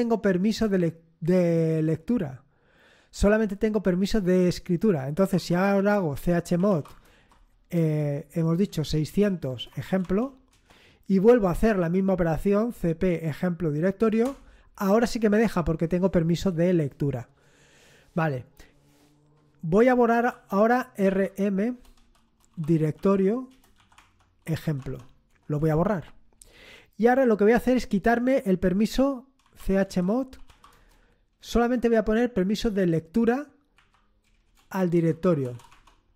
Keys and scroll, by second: 5.1-10.3 typing, 10.5 Return, 11.5 Up, 12.0 Up, 14.2 Return, 20.2 typing, 21.9-24.9 typing, 23.9 Tab, 25.5 Return, 29.1-30.9 typing, 33.7-35.9 typing.